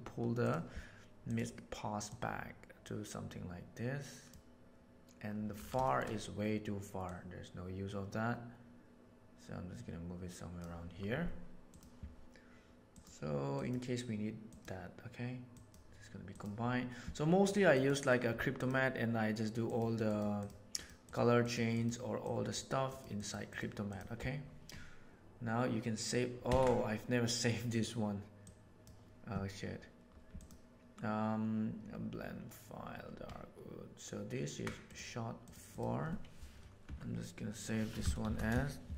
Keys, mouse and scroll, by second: 0.4 click, 1.3 drag, 2.1-4.2 drag, 5.8 shift+middle click, 7.0-10.6 drag, 12.8 right click, 13.6-15.7 right drag, 17.7 right click, 19.6 click, 20.8 click, 21.4 click, 21.7 click, 22.2 click, 22.9 click, 23.1 click, 23.4 click, 26.5 ctrl+s.